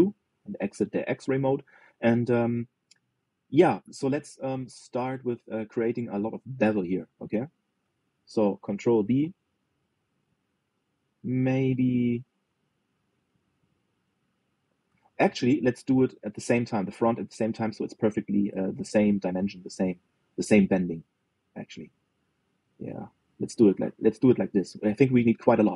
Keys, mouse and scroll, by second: 0.4-5.1 shift+middle drag, 5.4-6.7 shift+middle drag, 6.7 click, 7.7 click, 9.7 ctrl+b, 16.0 ctrl+z, 16.4 middle click, 17.3 shift+click, 17.8-19.0 middle drag, 19.0 ctrl+b.